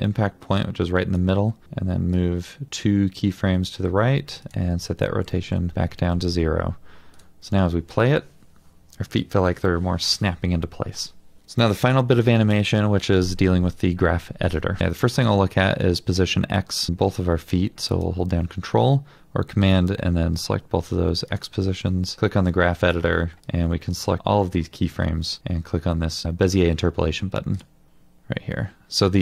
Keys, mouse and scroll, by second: 5.5 Return, 13.8-14.8 scroll up 1, 17.9 ctrl+click, 22.2 scroll down 1, 22.7 middle click.